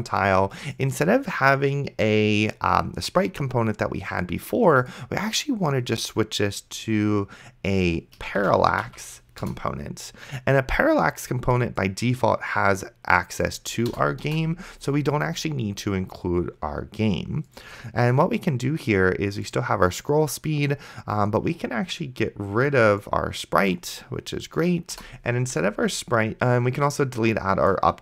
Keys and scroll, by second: 8.6 a, 9.4 Return, 14.2 BackSpace, 25.2 BackSpace.